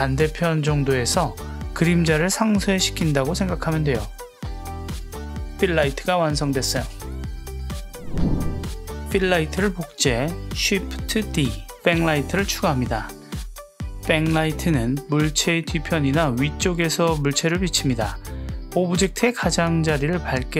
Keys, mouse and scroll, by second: 0.5 click, 1.0 click, 4.4 click, 5.1 click, 9.7 shift+d, 12.6 click, 14.4 g, 15.6 click, 17.5 g, 19.6 click.